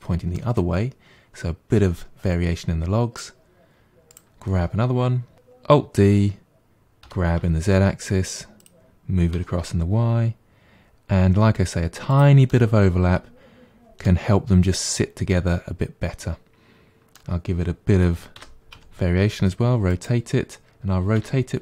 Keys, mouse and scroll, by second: 0.4-3.4 middle drag, 4.1 click, 5.3 alt+d, 9.3 g, 12.5-17.8 middle drag, 18.4 r, 21.2 r.